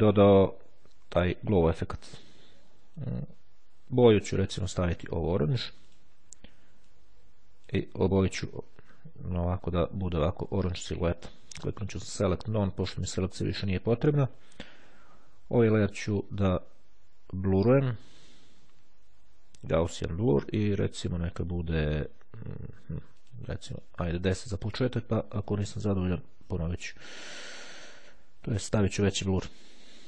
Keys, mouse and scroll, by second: 3.0 click, 4.4 click, 6.0 click, 7.0-8.3 drag, 11.8 click, 12.7 click, 17.4 click, 19.8 click, 21.8 click, 22.8 click, 24.8 click, 29.2 click.